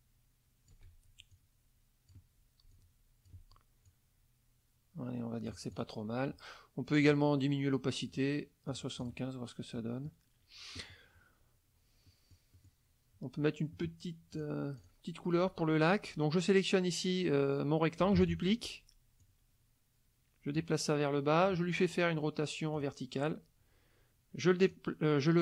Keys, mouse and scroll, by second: 1.3 click, 2.7-3.5 shift+drag, 3.9-5.7 shift+drag, 5.7 click, 7.0 click, 8.1 click, 8.7-9.3 drag, 9.7 middle click, 12.1 middle click, 14.3 click, 14.8 click, 18.2 ctrl+d, 19.2-20.8 drag, 22.7 click, 24.6 click.